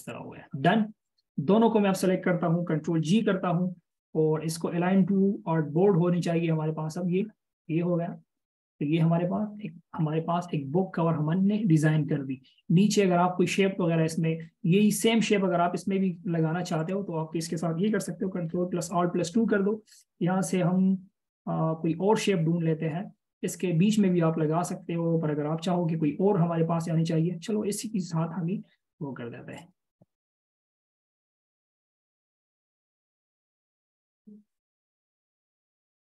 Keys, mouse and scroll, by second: 3.4 ctrl+g, 7.6 double click, 9.9-10.4 alt+shift+scroll up 1, 11.1-11.6 alt+shift+scroll, 11.6 alt+shift+scroll down 1, 14.8 alt+shift+scroll up 1, 24.0-24.7 scroll down 1, 24.7 scroll up 1, 27.3 scroll down 1, 28.6-30.0 scroll up 1.